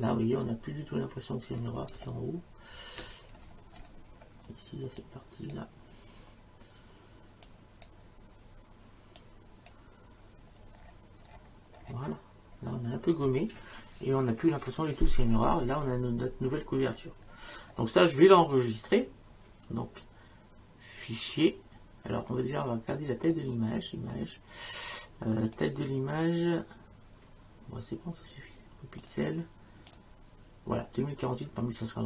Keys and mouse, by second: 1.9 space, 2.1 click, 5.0 click, 7.4 click, 9.2 click, 23.3 click, 25.5 click, 29.0 click.